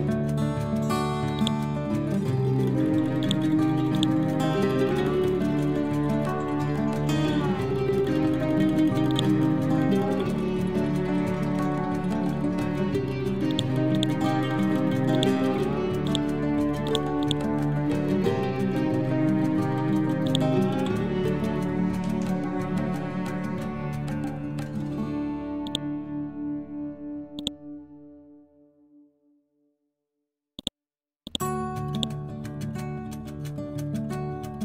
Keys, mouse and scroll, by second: 0.2 Return, 1.2-3.1 drag, 4.5 typing, 6.8 Return, 9.0 click, 9.8-10.4 typing, 11.3 Return, 13.4 click, 16.5 c, 16.7 click, 18.2 Up, 20.1 click, 25.5-30.5 drag, 32.6 1, 33.8 6.